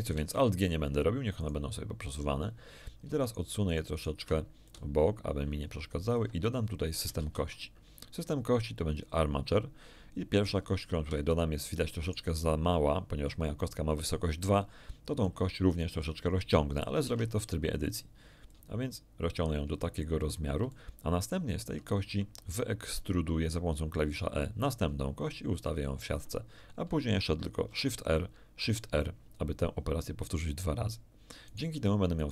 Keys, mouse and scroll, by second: 1.3 right click, 3.2 shift+right click, 3.7-4.2 shift+right drag, 4.6-6.3 shift+drag, 7.1 shift+a, 8.9 click, 10.5 middle click, 10.5-10.8 scroll up 1, 11.3 shift+middle click, 12.0 shift+right click, 15.1 right click, 17.0 Tab, 18.5-19.9 drag, 20.7 ctrl+shift+middle click, 22.8 e, 25.6 ctrl+click, 26.4-26.7 ctrl+scroll down 1, 27.7 shift+r, 31.4 right click, 32.1 right click.